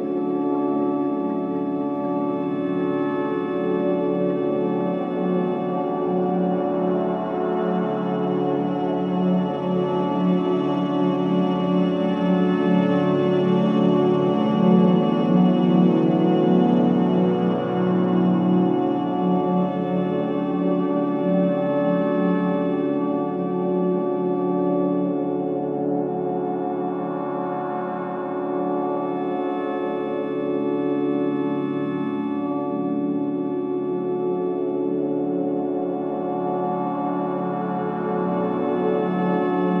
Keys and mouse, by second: 0.0-0.4 typing, 1.9 click, 2.8-3.6 typing, 4.7-6.5 alt+drag, 6.6-7.3 typing, 7.7-9.3 drag, 9.6-11.4 drag, 11.7 typing, 12.7 click, 13.6 typing, 14.7-15.8 drag, 15.9-16.6 typing, 16.6-17.6 ctrl+alt+drag, 17.7 alt+click, 20.3 alt+click, 20.7 alt+middle click, 22.1 alt+click, 22.9 Tab, 23.7 click, 25.0 shift+click, 25.8-26.2 typing, 27.1-30.0 shift+drag, 30.2 Tab, 30.6 alt+click, 31.1 click, 31.6 ctrl+alt+click, 32.1 click, 32.4 ctrl+alt+click, 33.2 alt+click, 33.3 middle click, 33.4-33.8 drag, 33.9-34.7 alt+middle drag, 34.7 alt+click, 34.7 typing, 35.1 alt+a, 35.7-37.4 alt+drag, 37.4 alt+middle click, 37.4 typing, 37.6-38.8 alt+drag, 39.7-39.8 drag.